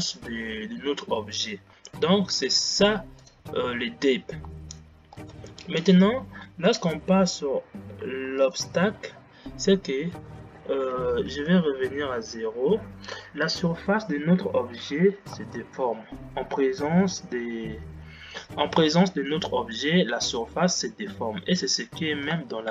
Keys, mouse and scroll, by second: 3.5 click, 5.7 space, 6.0-12.0 drag, 12.0 shift+Left, 13.8 scroll up 2, 15.6 space, 19.6-22.7 middle drag.